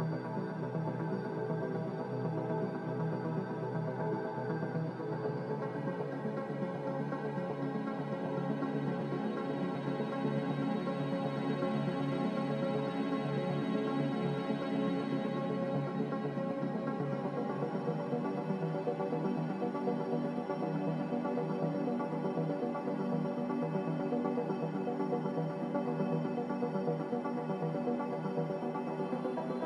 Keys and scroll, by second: 1.4 a, 3.2 z, 8.5 a, 11.1 z, 16.0 a.